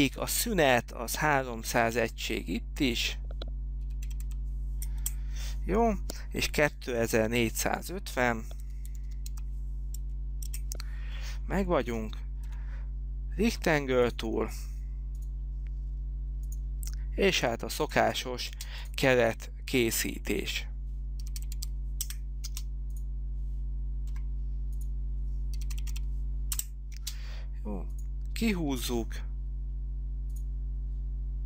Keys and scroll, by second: 3.8-4.7 typing, 5.2 Return, 8.5-9.9 typing, 10.6 Return, 12.7 r, 18.6 space, 19.8 f, 21.1-22.6 typing, 22.2 Return, 24.2 f, 25.4-27.1 typing, 26.6 Return, 29.0 p.